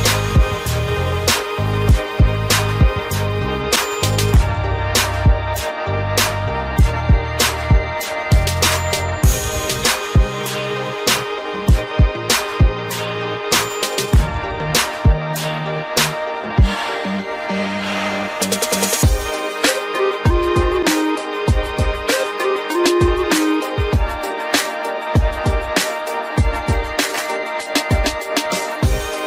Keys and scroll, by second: 24.9 ctrl+0.